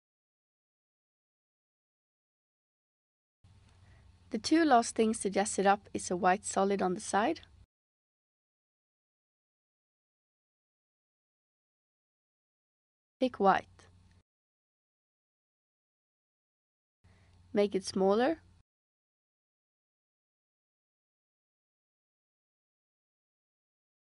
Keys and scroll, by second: 0.2 space, 14.9 Return.